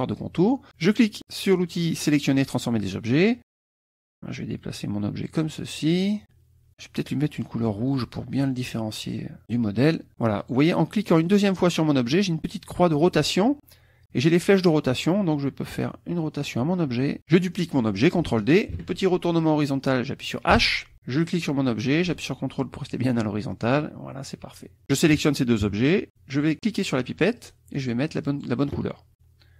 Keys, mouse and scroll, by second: 2.5 click, 3.5-5.4 drag, 5.5 middle click, 5.5-6.1 scroll down 1, 6.2 middle click, 6.2-6.7 scroll down 1, 7.9 click, 8.5 click, 10.4 click, 11.2 click, 14.6-17.2 drag, 17.2 middle click, 18.7 ctrl+d, 20.5 h, 21.2-25.1 drag, 25.6 shift+KP_Subtract, 27.3 click, 28.2 click.